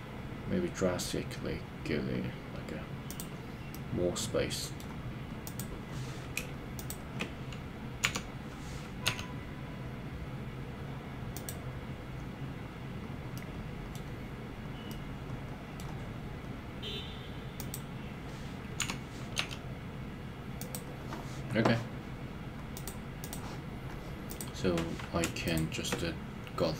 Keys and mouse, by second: 3.7-4.8 middle drag, 8.1 KP_3, 9.1 g, 11.3 click, 13.3 middle click, 14.9 middle click, 18.8 KP_3, 19.4 g, 20.7 click, 22.7 click.